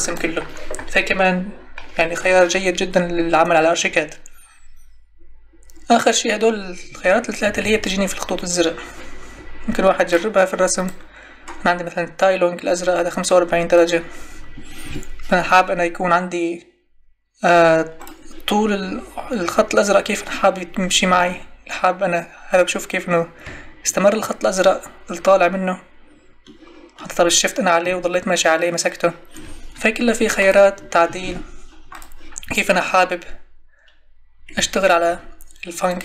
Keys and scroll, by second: 7.4 Escape.